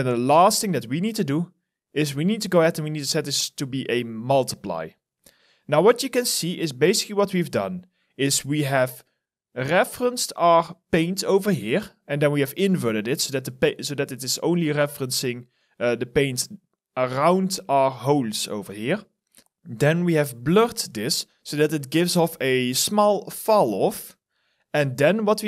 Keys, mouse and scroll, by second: 8.9-10.8 scroll down 1, 11.7 scroll up 1, 13.7 alt+right click.